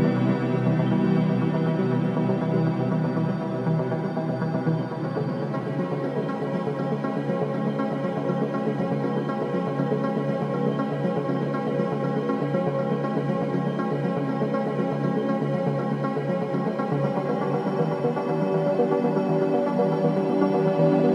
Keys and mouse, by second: 1.3 click, 1.9 click, 3.0-4.5 drag, 8.5 i, 9.5 click, 11.2 click, 13.4-16.9 drag, 17.5 click, 19.7 click, 19.9-20.5 drag.